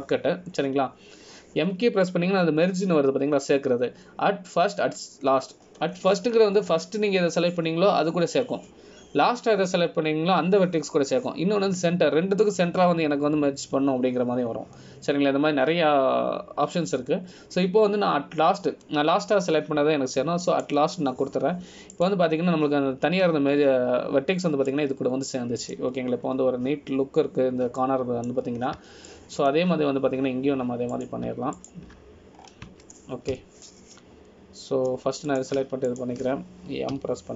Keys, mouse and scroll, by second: 1.5 m, 24.1 click, 24.4-25.7 scroll down 2, 26.9 middle click, 26.9 scroll down 2, 28.1 scroll down 2, 29.0-29.8 scroll down 1, 30.0 middle click, 30.5 scroll down 1, 31.2 shift+middle click, 33.1 click, 33.7 shift+click, 34.6 scroll up 1, 35.5-36.1 scroll up 3, 35.5 KP_Decimal.